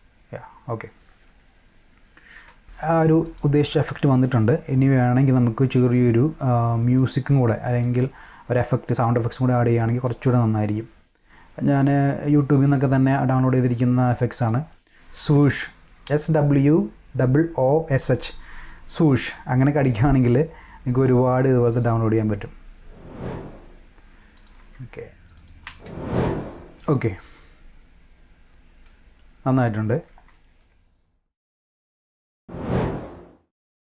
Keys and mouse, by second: 1.9 space, 3.2 click, 7.0 click, 7.8 click, 8.7-10.1 drag, 14.4 click, 15.4 =, 19.6-20.2 drag, 21.0 click, 21.7 click, 22.1 space, 23.8 space, 24.3 =, 25.3 click, 25.6 space, 30.1 space, 30.6 space, 31.6 click, 31.8 space, 32.0 click, 32.3 space.